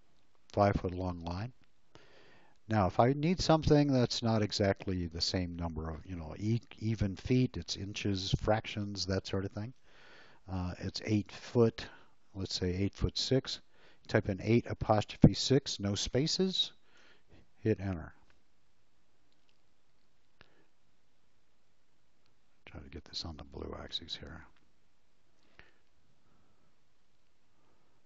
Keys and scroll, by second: 11.3 8, 15.4 6, 16.9 Return.